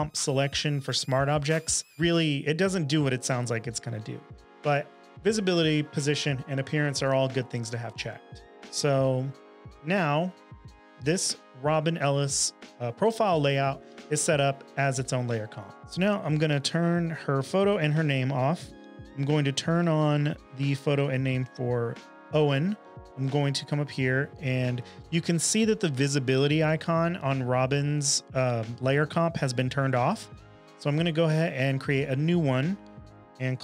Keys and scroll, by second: 33.3-33.6 typing.